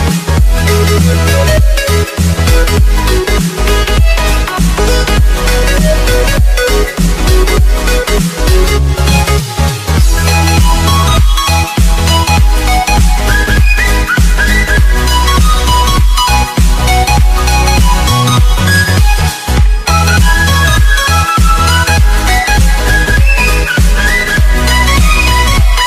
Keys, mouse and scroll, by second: 0.4-0.8 scroll down 1, 0.8 click, 1.4 right click, 1.9 click, 2.3 Tab, 4.0 alt+scroll down 1, 4.7 click, 6.3 Return, 6.7 click, 16.7 Delete, 18.8 click, 22.1 click, 22.9 alt+click, 23.7 click, 24.4 alt+scroll up 2, 24.8 scroll, 25.2 click.